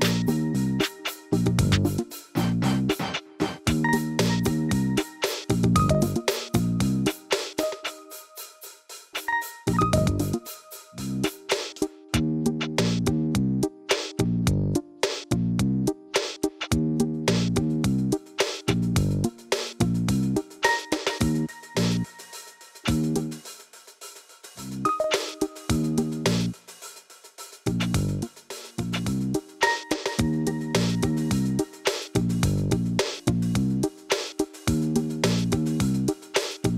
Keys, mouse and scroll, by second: 0.7 alt+s, 1.3 ctrl+r, 2.6 g, 4.2-5.2 middle drag, 5.2 Tab, 5.5-6.3 middle drag, 6.3 ctrl+2, 6.9 Tab, 8.1 scroll down 1, 8.1 middle click, 8.9 ctrl+r, 10.2 s, 13.0-14.0 middle drag, 14.0 ctrl+r, 15.3 ctrl+r, 16.3 middle click, 17.0 Tab, 17.9-18.3 right drag, 18.3 middle click, 18.9 KP_1, 21.1 KP_7, 22.0 KP_1, 22.9 KP_Divide, 23.5-24.9 scroll down 1, 26.6 r, 27.8 KP_3, 28.5 r, 30.4 r, 31.4 KP_1, 32.3 g, 33.9 g, 36.0 g.